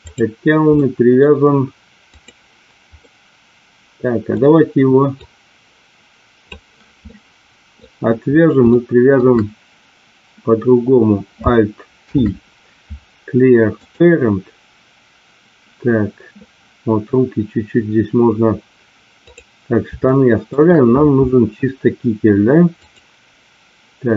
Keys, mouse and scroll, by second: 0.0 click, 0.8-1.2 middle drag, 2.0 click, 3.1-4.3 middle drag, 5.4-6.8 drag, 7.0 middle click, 8.7-9.1 shift+middle drag, 11.9 alt+p, 19.2 click, 20.0-20.5 shift+middle drag, 22.6 click.